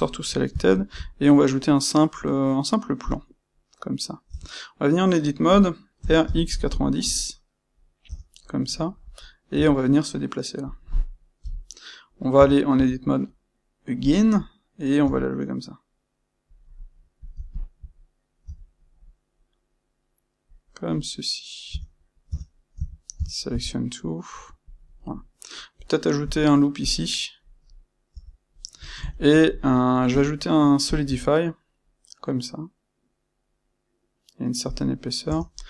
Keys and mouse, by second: 0.6 shift+q, 3.1 shift+q, 4.2 Tab, 7.0 KP_Enter, 8.0 Tab, 9.5 g, 10.7 click, 11.3 KP_1, 12.3 Tab, 14.0 click, 14.9 g, 16.5 click, 17.1 click, 17.4 shift+click, 18.4 g, 20.6 click, 21.6 Tab, 22.7 a, 24.7 click, 24.9-27.0 middle drag, 26.1 ctrl+r, 27.0 right click, 27.3-30.0 middle drag, 28.0 Tab, 30.0 space.